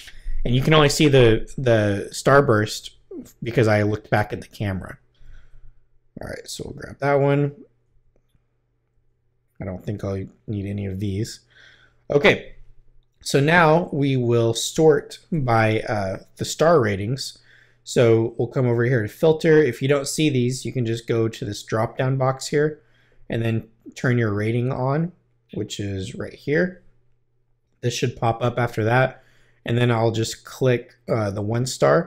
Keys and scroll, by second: 6.2 Right, 7.8 Right, 10.5 Left.